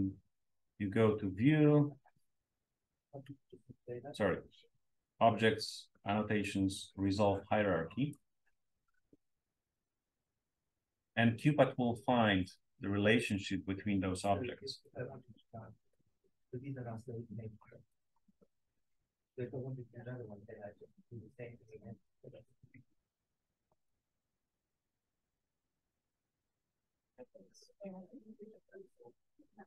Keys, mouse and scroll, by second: 1.2-3.6 scroll up 1, 3.6-6.6 scroll up 1, 6.6-8.5 scroll up 1, 10.0 click, 11.9-13.2 drag, 14.2-15.8 drag, 16.2 click, 17.8 right click, 18.5 click, 19.6-20.8 drag, 20.8-22.0 right drag, 22.9-23.9 drag, 25.0 click, 26.4 click, 27.0-27.6 scroll down 2, 27.6-29.4 scroll up 2.